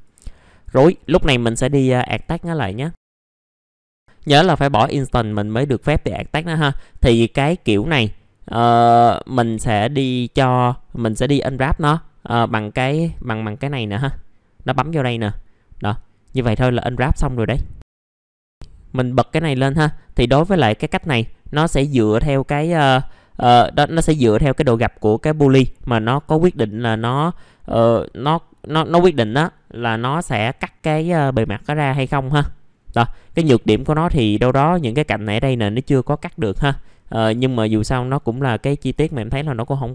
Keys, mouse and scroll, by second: 0.8 right click, 2.0 click, 3.4 click, 5.2-8.9 scroll up 1, 8.9-9.6 scroll down 1, 9.6 middle click, 12.4 click, 18.0 middle click, 18.5 click, 21.7 middle click, 23.3-25.6 scroll up 1, 30.7 scroll down 1, 31.7 middle click, 32.2-36.2 scroll up 1, 36.2-37.1 scroll down 1, 37.7 click.